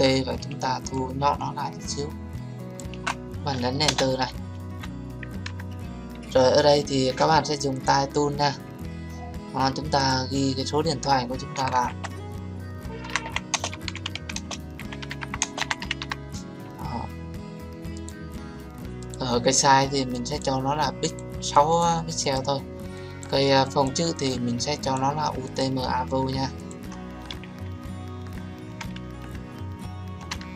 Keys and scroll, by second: 3.8 Return.